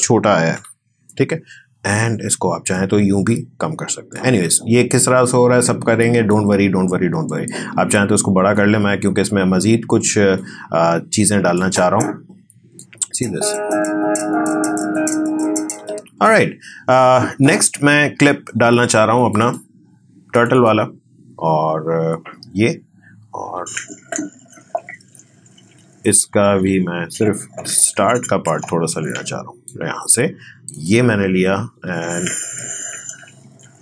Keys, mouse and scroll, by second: 0.5 Delete, 2.7-8.5 drag, 8.5-13.0 drag, 13.0 space, 15.7 space, 17.0-19.2 drag, 23.5 space, 26.6-30.7 drag, 31.7 space.